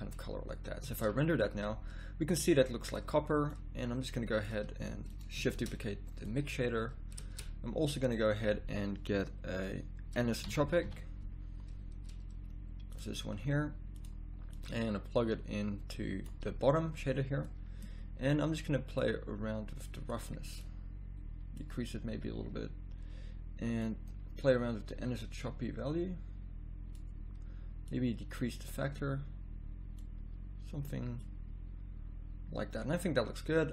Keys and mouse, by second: 1.2 shift+z, 6.6 middle click.